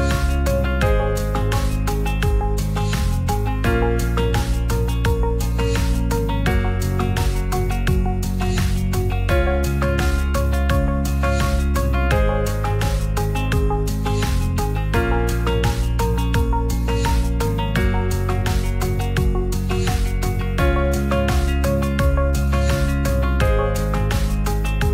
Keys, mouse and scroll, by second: 0.2 click, 0.8 click, 1.7 middle drag, 2.3 s, 3.0 z, 3.6 right click, 4.0 s, 4.2 x, 5.0 click, 6.8 ctrl+s, 7.4 Tab, 8.4 click, 8.6 Tab, 8.9 ctrl+r, 9.9 click, 10.1 Tab, 10.3 middle drag, 10.9 Tab, 11.5 Tab, 12.6 ctrl+s, 13.1 ctrl+z, 14.0-15.3 drag, 15.6 ctrl+z, 16.0-17.0 drag, 18.0 ctrl+a, 19.7-21.6 shift+drag, 21.8-22.2 middle drag, 22.8 Tab, 23.2 Tab, 24.1-24.9 drag.